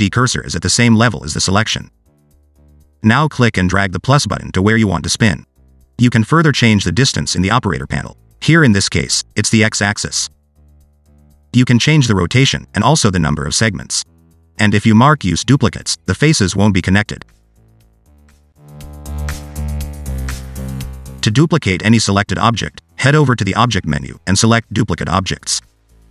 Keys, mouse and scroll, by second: 0.3 scroll down 2, 1.0 shift+middle click, 2.2 shift+right click, 2.6 scroll up 1, 3.3 shift+right click, 3.8 scroll up 1, 6.0 click, 7.4 click, 8.4 scroll down 3, 9.2 click, 12.0 click, 13.7 click, 15.7 click, 16.5 middle click, 18.8 click, 23.0 click.